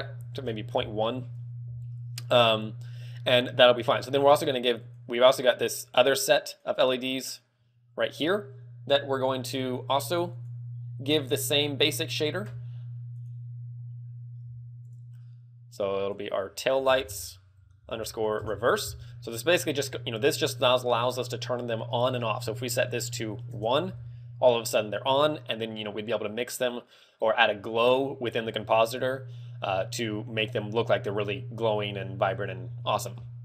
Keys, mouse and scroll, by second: 0.4 ctrl+click, 4.3 right click, 5.1 right click, 6.0 right click, 6.8 right click, 7.5 right click, 14.7 click, 15.6 click, 15.9 click, 22.8 ctrl+click, 32.7 ctrl+click.